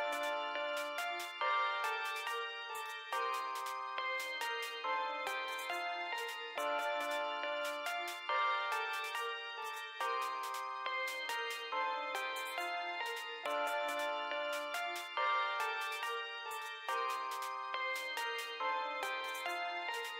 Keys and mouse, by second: 1.6 -, 1.9 x, 3.8 4, 4.1 2, 8.4 BackSpace, 10.8 click.